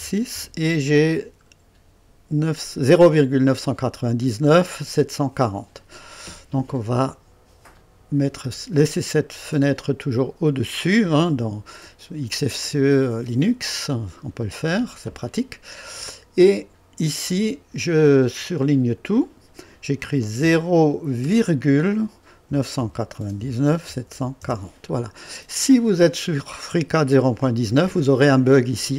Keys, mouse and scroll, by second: 0.0 KP_Decimal, 0.0 KP_2, 0.0 KP_6, 0.3 KP_Enter, 7.7 right click, 10.9 click, 12.3-13.9 drag, 17.4 click, 18.3 click, 20.4 KP_0, 21.2 ,, 22.5-24.4 typing, 25.8 typing.